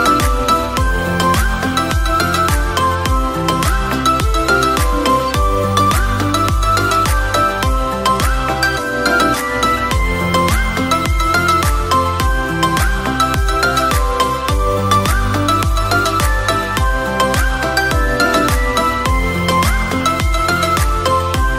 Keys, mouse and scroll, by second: 2.6 click, 3.4 x, 5.2 shift+a, 8.3 s, 10.5-12.1 drag, 14.6-15.1 scroll down 4, 15.1 s, 16.4-19.4 drag, 20.4 click.